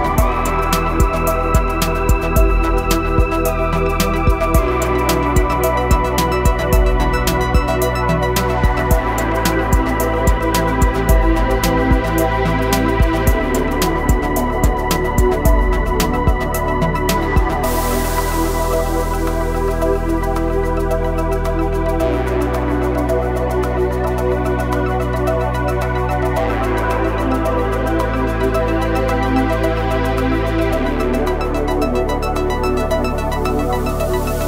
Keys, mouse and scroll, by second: 4.4 right click, 5.5-10.3 drag, 12.4 click, 14.3-18.3 drag, 18.4-20.4 drag, 20.6-24.1 drag, 24.1-29.6 drag, 29.6-33.0 drag.